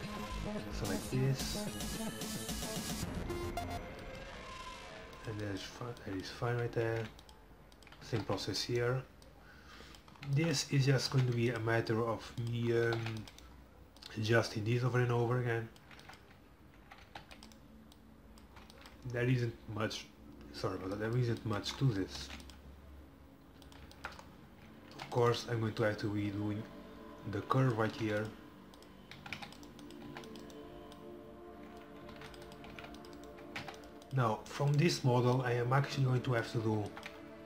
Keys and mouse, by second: 0.3 c, 1.8-3.7 drag, 7.0 ctrl+r, 8.1 a, 8.3 c, 9.3-10.9 drag, 9.3-10.8 right drag, 10.5 middle click, 11.2 ctrl+r, 12.5 click, 12.9 a, 13.0 c, 14.0-16.1 drag, 15.8 middle click, 17.1 a, 17.3 c, 18.0-19.4 middle drag, 19.4 click, 22.2 ctrl+r, 24.7 a, 25.0 c, 25.9-27.8 drag, 28.0 ctrl+r, 29.2 a, 29.4 c, 30.1 c, 31.6-32.7 drag, 32.2 ctrl+r, 32.9 c, 33.5 a, 33.7 c, 35.4-37.3 drag.